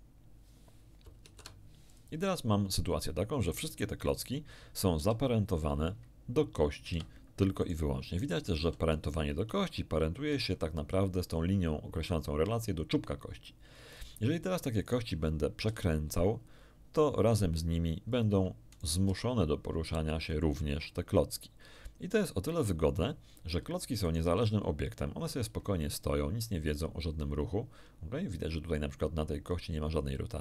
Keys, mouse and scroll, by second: 1.2 ctrl+p, 1.9 ctrl+click, 3.7 right click, 4.9 g, 6.9 Escape, 7.5 right click, 8.5 g, 10.3 Escape, 14.8 right click, 15.6 r, 18.1 ctrl+click, 18.7 ctrl+right click, 19.0 ctrl+r, 20.1 ctrl+click, 24.0 right click, 24.2 g, 26.2 Escape.